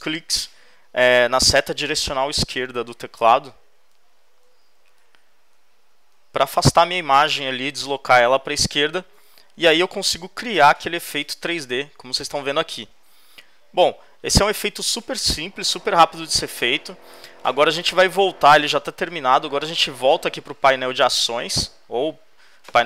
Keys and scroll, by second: 3.3 shift+Left, 4.0 shift+Left, 5.3 shift+Left, 9.2 shift+Left.